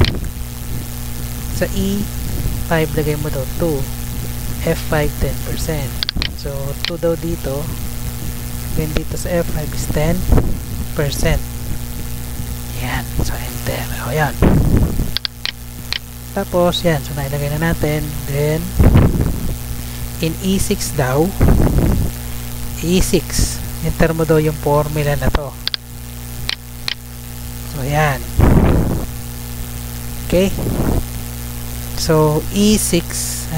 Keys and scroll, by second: 8.0 2, 8.5 Right, 9.3-10.2 typing, 11.9 shift+5, 13.3 Return, 31.8 Tab.